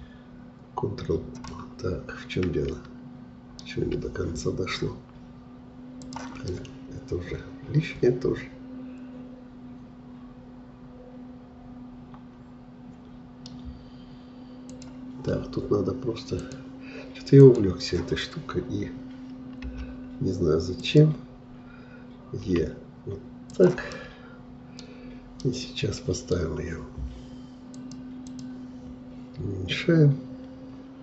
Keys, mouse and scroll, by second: 1.5-4.5 middle drag, 6.0 click, 6.5-9.5 middle drag, 14.7-19.6 drag, 22.5 e, 23.9 middle click, 24.8-25.4 scroll down 3, 25.4-27.7 middle drag, 27.7-31.0 drag.